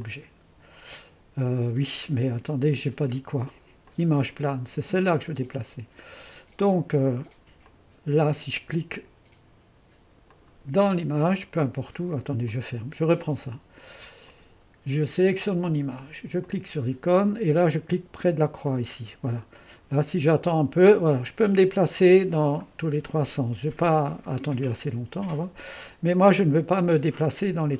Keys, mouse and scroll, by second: 0.0-4.5 drag, 7.6-9.6 drag, 10.3 click, 12.5-15.3 drag, 15.4-16.9 drag, 18.7 click, 22.6-24.2 drag, 24.4-25.7 drag.